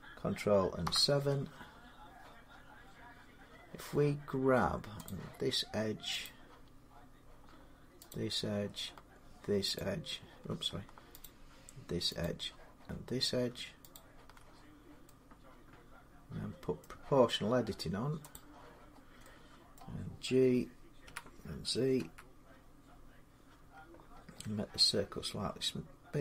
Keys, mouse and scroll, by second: 0.6 7, 4.9 click, 6.1 click, 7.9 shift+click, 9.6 click, 11.0 click, 12.0 shift+click, 13.8 shift+click, 16.6 middle click, 18.1 click, 18.7-19.0 scroll down 2, 19.6-20.8 scroll up 1, 20.8-22.6 typing, 22.6 middle click, 23.6-24.6 scroll up 11, 24.7-26.2 scroll, 24.7 z.